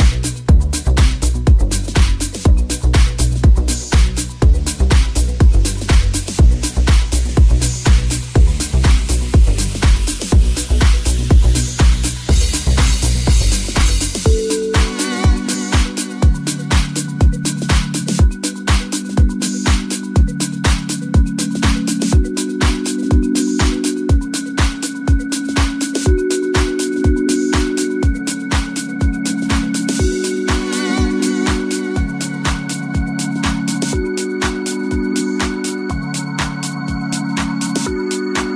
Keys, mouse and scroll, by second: 0.1-3.6 drag, 0.2 ctrl+z, 1.4 ctrl+z, 3.9-7.1 shift+drag, 5.1 middle click, 5.1 right click, 6.8 shift+middle click, 6.8 shift+right click, 7.8-38.5 drag, 11.2 right click, 11.2 1, 11.6 right click, 12.5 j, 13.3 middle click, 13.3 right click, 13.6 3, 13.7 middle click, 13.7 right click, 14.0 middle click, 14.0 right click, 19.4 middle click, 19.4 right click, 19.7 shift+middle click, 19.7 shift+right click, 20.0 shift+middle click, 20.0 shift+right click, 20.4 shift+middle click, 20.4 shift+right click, 23.9 middle click, 23.9 right click, 24.2 shift+middle click, 24.2 shift+right click, 24.4 shift+middle click, 24.4 shift+right click, 24.7 shift+middle click, 24.7 shift+right click, 25.0 shift+middle click, 25.0 shift+right click, 25.4 shift+right click, 29.1 middle click, 29.1 right click, 29.5 shift+middle click, 29.5 shift+right click, 29.7 shift+middle click, 29.7 shift+right click, 29.9 shift+middle click, 29.9 shift+right click, 34.0 middle click, 34.0 right click, 34.2 shift+middle click, 34.2 shift+right click, 34.4 shift+middle click, 34.4 shift+right click, 37.2 shift+middle click, 37.2 shift+right click, 37.4 shift+middle click, 37.4 shift+right click, 37.7 shift+middle click, 37.7 shift+right click, 38.0 shift+middle click, 38.0 shift+right click, 38.2 shift+middle click, 38.2 shift+right click, 38.4 shift+middle click, 38.4 shift+right click.